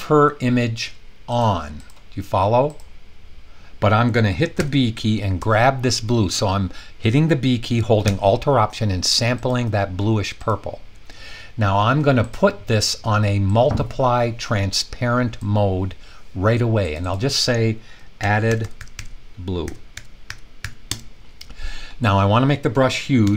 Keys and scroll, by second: 4.5 b, 17.9-21.1 typing, 23.0-23.3 typing.